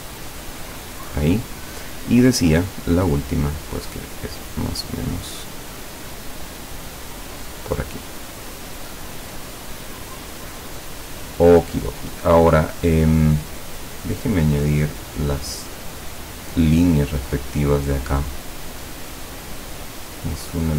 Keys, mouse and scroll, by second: 2.5 click, 5.3 click, 7.1 click, 9.8 click.